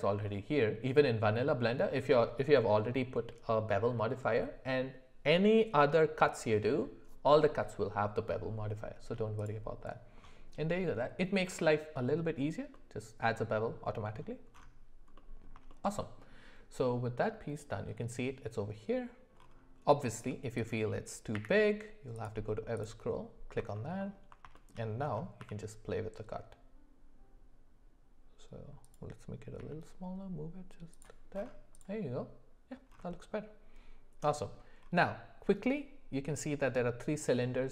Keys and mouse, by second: 12.7-14.1 middle drag, 15.1 middle click, 15.7-16.2 shift+middle drag, 20.0 shift+middle click, 20.6 click, 21.3 q, 23.7 alt+middle click, 24.0 alt+middle click, 24.5 shift+middle click, 25.4 s, 29.6 g, 31.7 click.